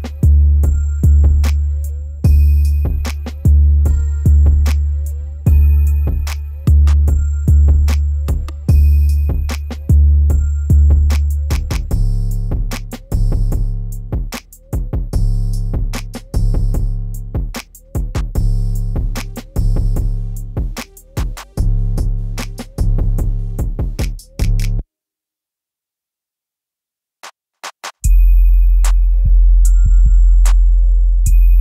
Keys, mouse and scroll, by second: 11.5 ctrl+z, 12.0-12.5 scroll up 1, 12.5 click, 13.1-13.5 scroll down 1, 13.6 ctrl+z, 15.1-18.8 drag, 18.8 ctrl+Home, 22.0 click, 25.3 ctrl+z, 26.2-27.9 scroll down 1, 27.9-31.3 drag.